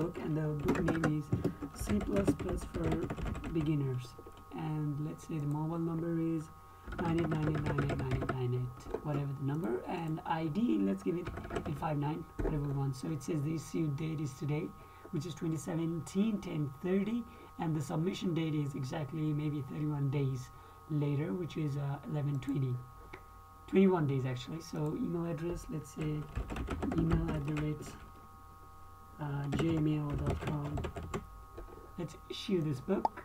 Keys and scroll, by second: 1.0-4.4 typing, 1.2 KP_Add, 1.4 KP_Add, 11.9 KP_5, 26.6-28.1 typing, 29.7-31.9 typing.